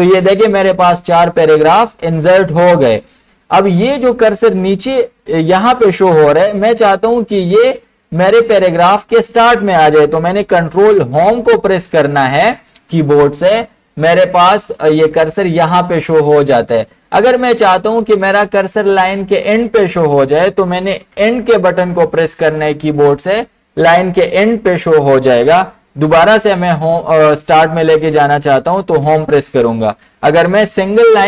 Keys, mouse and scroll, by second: 1.2 click, 10.4 ctrl+Num_Lock, 11.2 ctrl+Home, 21.2 End, 29.0 Home.